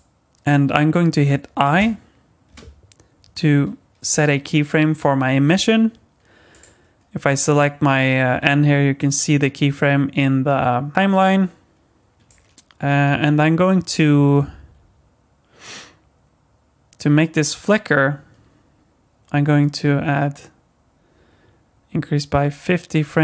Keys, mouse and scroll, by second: 2.5 i, 6.5 click, 12.3 click.